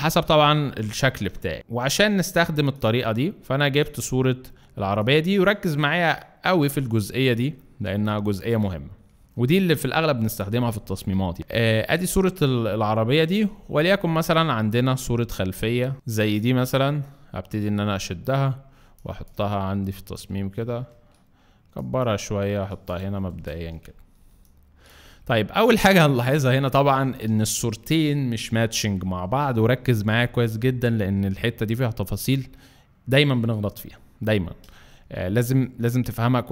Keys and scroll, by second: 12.4 space, 18.8 space, 23.3 Return.